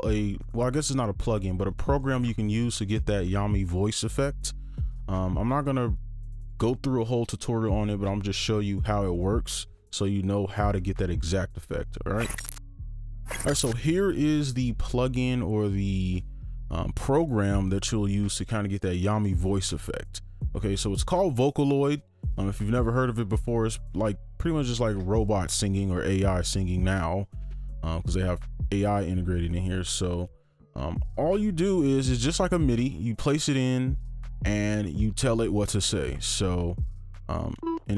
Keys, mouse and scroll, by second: 37.6-37.9 typing.